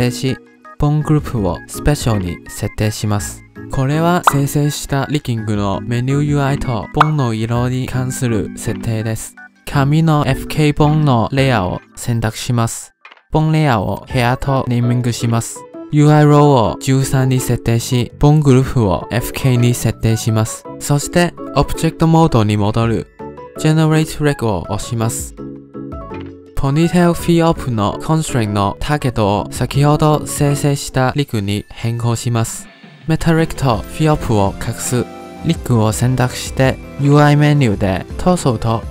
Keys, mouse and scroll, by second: 9.7-11.0 scroll up 1, 11.0 click, 12.5-13.6 scroll down 8, 13.6-16.1 drag, 16.3-20.2 drag, 22.0 ctrl+Tab, 23.9-24.9 scroll down 9, 24.9 click, 26.0 scroll down 6, 26.1 shift+middle click, 26.5 shift+middle click, 26.5 click, 27.3 click, 28.6 click, 28.9 click, 30.2-32.4 drag, 34.2 click, 34.9 click, 35.7 click, 37.0-38.9 drag.